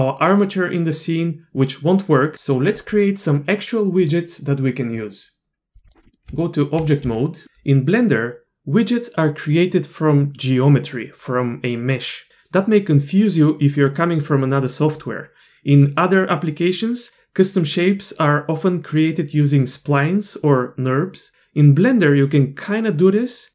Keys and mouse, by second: 6.1 middle click, 6.3 Tab, 7.2 shift+drag.